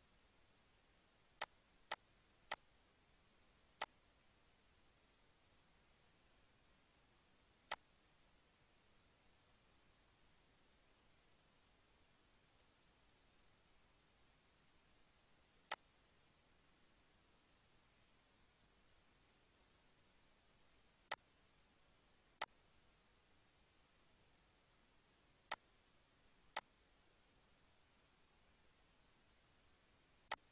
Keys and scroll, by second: 5.3 Down.